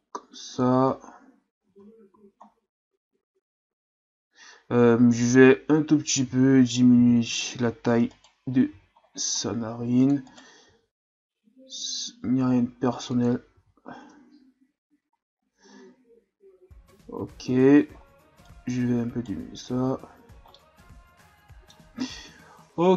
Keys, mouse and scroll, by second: 0.9-1.7 scroll down 1, 1.7 Tab, 2.1 a, 2.4-4.6 scroll down 4, 4.6-5.2 scroll up 1, 5.2-6.1 scroll up 1, 6.1 Tab, 7.0 z, 8.1 right click, 8.7 c, 10.7 g, 13.5 z, 14.0 Tab, 15.4-17.2 scroll up 2, 17.5 Tab, 18.0-18.5 scroll up 1, 18.5 right click, 19.4 Tab, 19.9-20.5 scroll down 2, 20.5-22.2 middle drag, 22.2 KP_1.